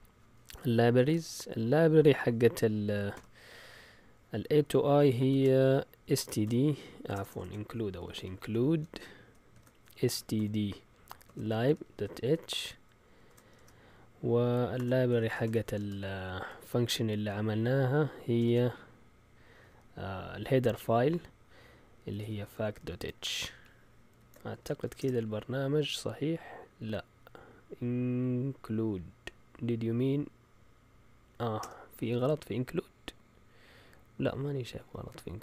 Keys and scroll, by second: 3.1 typing, 5.3-16.2 typing, 18.3 typing, 21.8-25.3 typing, 24.1 Escape, 31.6 Return, 34.7 Down.